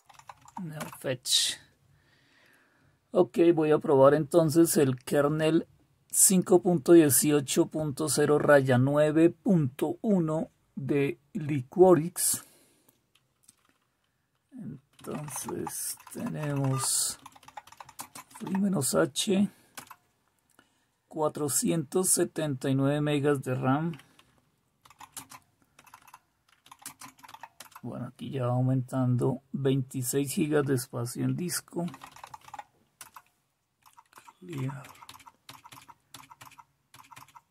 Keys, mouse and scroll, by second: 14.9-15.8 typing, 17.9-18.7 typing, 32.7-34.5 typing.